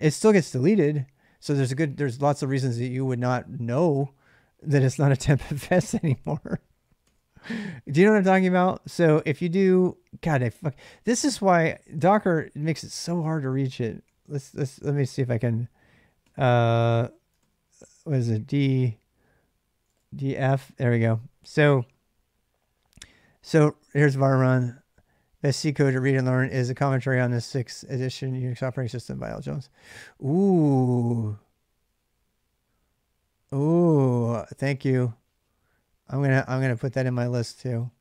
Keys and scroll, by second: 5.1 k, 5.5 k, 6.8 ctrl+c, 10.1 ctrl+[, 10.3 k, 13.0 ctrl+[, 13.2-14.3 typing, 16.0-16.4 typing, 17.2 ctrl+c, 17.6 d, 19.4-20.2 typing.